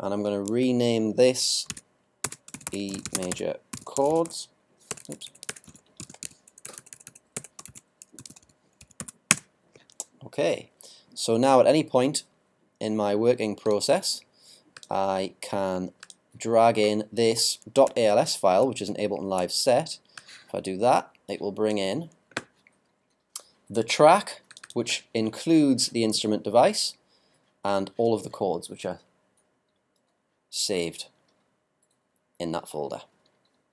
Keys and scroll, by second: 2.2-3.7 typing, 5.7 shift+c, 6.0 shift+h, 7.6 shift+BackSpace, 7.7 shift+c, 8.2 shift+h.